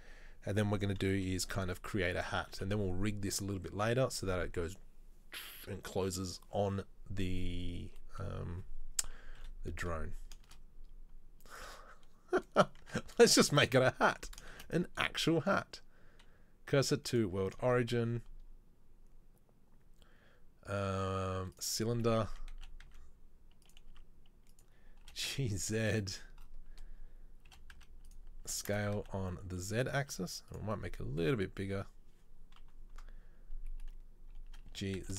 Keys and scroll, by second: 1.2 KP_3, 1.6 KP_1, 2.6 KP_1, 2.8 KP_3, 9.3 KP_3, 9.5 KP_1, 10.6 shift+a, 13.0 Tab, 14.6 shift+s, 17.7 shift+a, 22.5 Tab, 22.7 s, 24.1 s, 25.1 g, 27.5 g, 28.5 s, 30.2 s, 32.7 KP_3, 34.8 g.